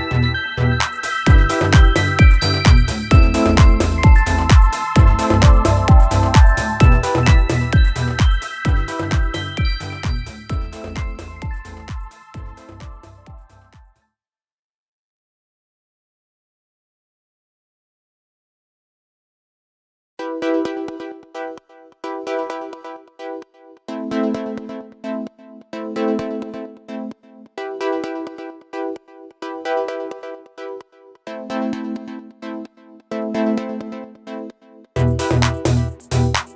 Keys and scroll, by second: 0.3 x, 3.7 ctrl+z, 3.8 ctrl+z, 19.2 x, 27.0 x, 30.1 ctrl+-, 30.1 ctrl+-, 33.8 ctrl+=, 33.9 ctrl+=.